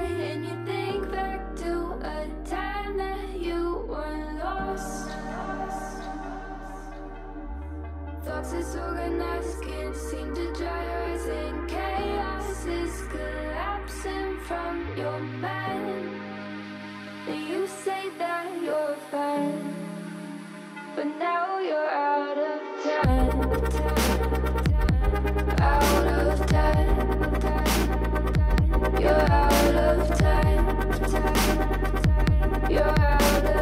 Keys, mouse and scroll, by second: 0.1 scroll down 3, 0.2 middle click, 0.9 KP_1, 1.2 scroll up 2, 1.5 alt+z, 1.7 click, 2.4 g, 3.3 KP_3, 3.6 middle click, 4.6 KP_3, 5.1 g, 5.9 scroll down 2, 6.0 shift+middle click, 6.2-6.7 scroll up 3, 6.7 middle click, 7.0 KP_1, 7.3 scroll down 2, 7.6 click, 8.0 g, 9.2 KP_3, 9.7 g, 10.9-11.5 middle drag, 11.5 alt+z, 11.6 scroll down 4, 11.7-12.8 middle drag, 12.9 scroll down 4, 13.1 middle click, 13.4 click, 13.8 scroll up 2, 13.9-14.6 middle drag, 14.6 alt+z, 14.8 click, 14.9 alt+z, 15.1 click, 15.9 click, 16.0 click, 16.2 click, 16.3 middle click, 16.5 Tab, 16.6 click, 16.9 middle click, 17.1 scroll up 2, 17.2-18.2 middle drag, 21.4 scroll up 1, 21.6 click, 21.8 Tab, 22.0 shift+middle click, 22.2-23.3 scroll up 4, 22.4 alt+z, 22.6 shift+middle click, 23.3 click, 23.6 ctrl+KP_Add, 23.8 scroll down 3, 24.0 alt+z, 24.2 middle click, 24.5 g, 25.2 KP_3, 25.4-25.7 scroll up 2, 25.7 g, 26.2 middle click, 26.5-26.8 scroll down 2, 26.8-27.2 shift+middle drag, 27.2 alt+z, 27.4-27.7 scroll up 7, 27.7-29.0 middle drag, 29.0-29.6 scroll up 2, 29.6 middle click, 30.5 alt+click, 31.1 ctrl+KP_Add, 31.4 c, 32.3 KP_3, 32.6-33.0 scroll down 14, 33.0 scroll up 2, 33.2 g.